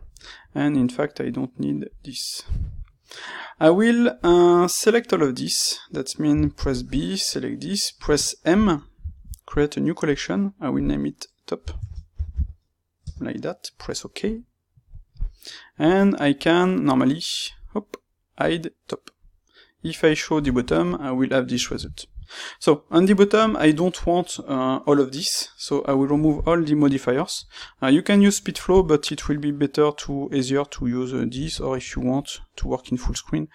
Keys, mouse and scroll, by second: 0.6-4.5 drag, 4.5 middle click, 5.1-6.2 drag, 6.2 b, 15.7 click, 17.4 click, 19.7 click, 21.1-33.5 middle drag, 31.6 '.